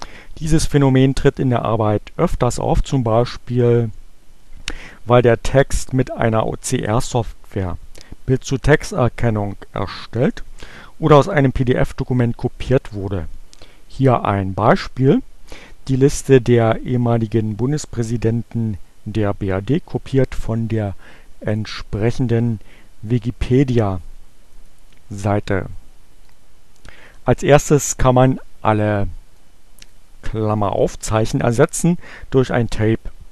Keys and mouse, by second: 21.4 click, 22.3-24.9 right drag, 25.3-26.6 drag, 29.2 click.